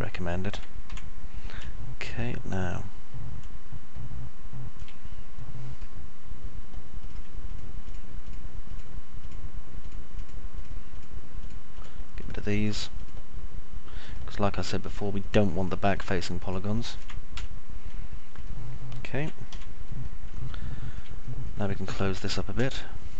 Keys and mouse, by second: 0.9 F3, 1.8-5.9 alt+middle drag, 7.6 ctrl+click, 7.9 click, 8.4 click, 8.8 click, 14.3 click, 14.9 click, 15.4 click, 17.6 Delete, 18.6-19.6 alt+middle drag, 19.6 F3, 19.9 middle click, 20.6 alt+middle click, 21.4 middle click, 21.8 alt+middle click.